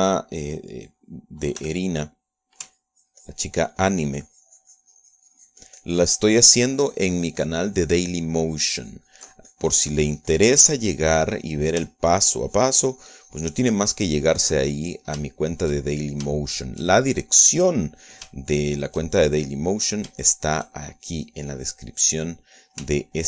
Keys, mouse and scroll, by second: 2.8 f, 3.4 click, 4.0-13.1 ctrl+drag, 16.0-17.6 ctrl+middle drag, 19.0 middle click, 20.9 middle click, 21.5 shift+middle click.